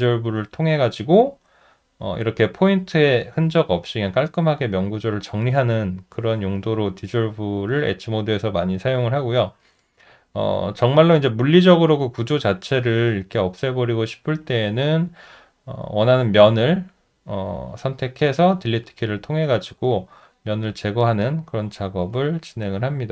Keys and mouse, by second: 9.4 alt+middle click, 9.8 alt+right click, 9.9 alt+double right click, 10.4 alt+right click, 11.1 alt+middle click, 11.7 alt+right click, 12.0 alt+middle click, 12.5 alt+right click, 12.6 alt+double right click, 19.3 alt+middle click, 19.8 alt+right click, 20.4 alt+middle click, 21.1 alt+click.